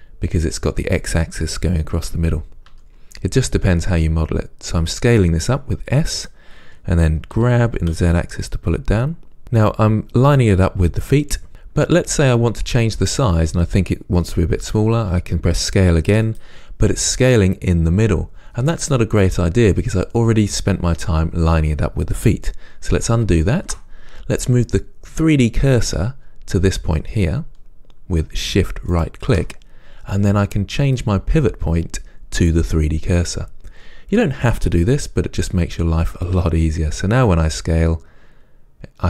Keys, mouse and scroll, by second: 2.9 s, 7.6 g, 11.5-23.7 shift+middle drag, 15.3 s, 23.7 ctrl+z, 29.1 shift+right click, 36.5-39.0 drag, 36.5 s.